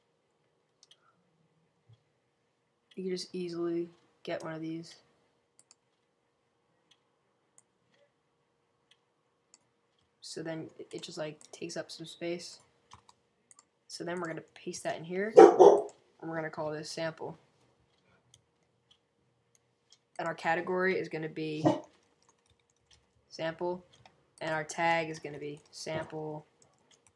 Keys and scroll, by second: 21.6-27.1 typing.